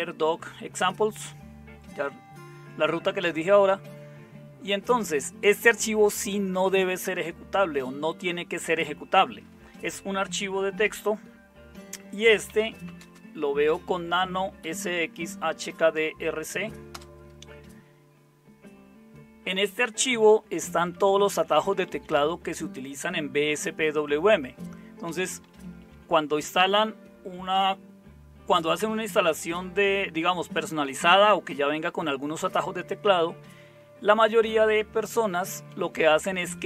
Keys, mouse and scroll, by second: 12.2-14.6 typing, 15.0 Tab, 16.9 Return, 20.8 Down, 21.0 Down, 21.2 Down, 21.4 Down, 21.5 Down, 21.9 Down, 22.2 Down, 25.1 Down, 25.3 Down, 25.5 Down, 25.6 Down, 25.8 Down, 34.1 Down, 34.4 Down, 34.6 Down, 35.2 Up, 35.4 Up, 35.6 Up, 35.8 Up, 36.0 Up.